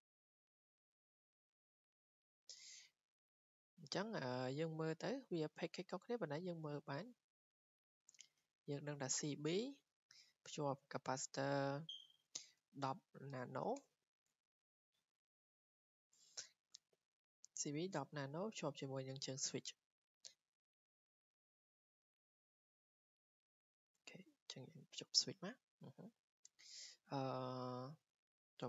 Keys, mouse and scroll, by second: 0.8 w, 1.4 click, 1.9 click, 2.3 Escape, 2.6-3.7 scroll, 4.8 click, 5.4 click, 6.1 click, 8.5 scroll, 9.3 scroll, 11.9 click, 12.1 click, 12.5-13.8 typing, 15.1 click, 15.7 click, 19.6 click, 20.9 w, 21.7 click, 22.3 click, 23.1 click, 25.0 click, 25.5 Escape, 26.4 Escape, 28.1 click.